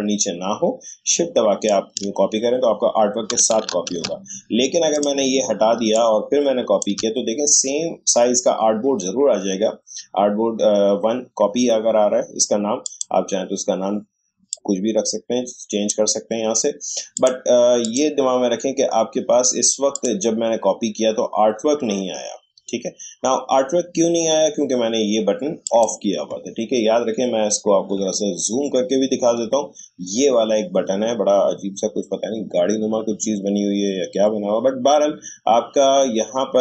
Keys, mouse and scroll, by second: 3.9 ctrl+z, 4.9 click, 5.9-9.2 drag, 12.8-17.2 drag, 25.6 click, 28.4 click, 28.6 shift+scroll up 1, 34.7 shift+scroll down 1.